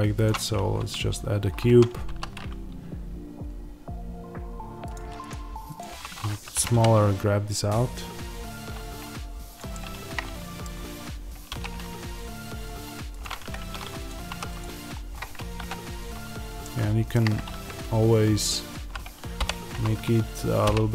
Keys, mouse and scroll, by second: 0.2 shift+a, 1.6 Tab, 2.0 s, 4.8 click, 5.8 3, 6.5 g, 9.6-14.0 middle drag, 11.4 ctrl+r, 13.4 Escape, 14.2 3, 14.4-15.5 drag, 15.5 KP_3, 16.2-16.5 scroll up 1, 16.5-20.9 shift+middle drag, 19.3 o.